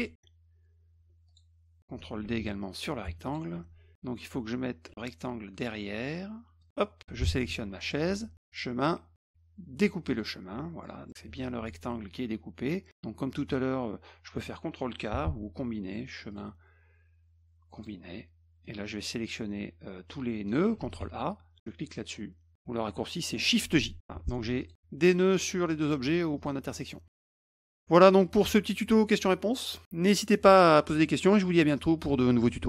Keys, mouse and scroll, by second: 1.3 click, 2.2 ctrl+d, 3.2 shift+click, 6.6 click, 7.8 shift+click, 8.5 click, 10.1 click, 10.8 middle click, 16.3 click, 17.7 click, 18.6-20.5 drag, 20.8 ctrl+a, 24.1 F2, 24.6 shift+click, 26.0 F1, 26.4 click.